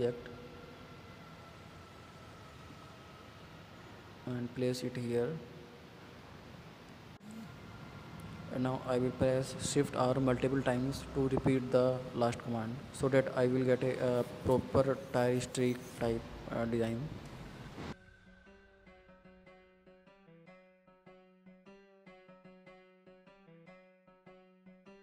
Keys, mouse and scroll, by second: 5.1-5.5 scroll down 4, 5.5 shift+middle click, 6.2 scroll up 1, 6.4-7.6 shift+middle drag, 7.6-9.4 shift+r, 9.9 shift+r, 10.8 shift+middle click, 11.1-11.8 scroll up 9, 11.8 shift+middle click, 12.1 click, 12.9 Delete, 13.7 click, 13.9 Delete, 14.4 scroll down 4, 14.7 scroll up 2, 15.2 shift+middle click, 16.0 scroll up 5, 16.3 scroll down 5, 16.5 shift+middle click, 17.4-18.6 scroll up 4, 18.6-19.0 scroll down 10, 19.0-19.4 scroll up 7, 19.4 shift+middle click, 19.8 click, 20.2 click, 20.4-21.7 scroll down 4, 21.7 scroll up 1, 21.8-22.5 scroll down 2, 22.5 shift+s, 22.7-23.5 middle drag, 23.5 KP_1, 23.9-25.0 scroll up 2.